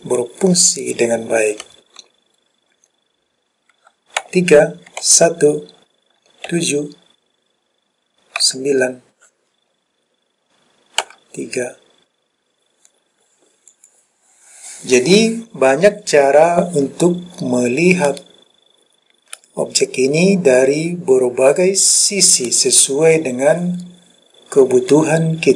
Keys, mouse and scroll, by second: 4.3 KP_3, 5.1 KP_1, 6.6 KP_7, 8.5 KP_9, 11.1 KP_3, 13.8 click, 18.2-22.6 middle drag, 22.7-23.5 scroll down 1.